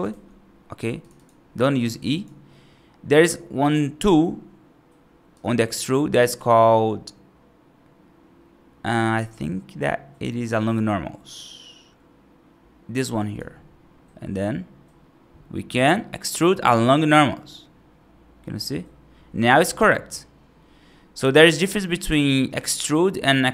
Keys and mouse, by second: 0.0 ctrl+z, 0.9 click, 1.0 click, 2.0 click, 5.3 click, 6.3-13.3 drag, 14.2-22.4 drag, 22.7-23.5 right drag.